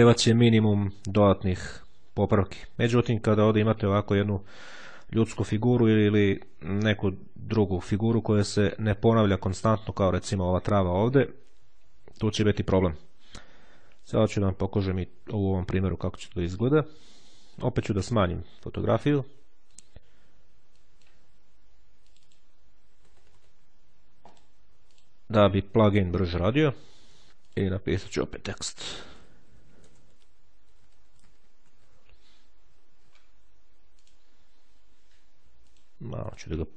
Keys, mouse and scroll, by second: 16.6-17.9 drag, 19.5 click, 20.6 click, 21.9 click, 22.5 KP_8, 23.0 KP_0, 23.9-25.3 drag, 26.4-27.3 ctrl+scroll up 2, 27.3 click, 28.3-32.2 typing, 33.7 click, 35.5 click.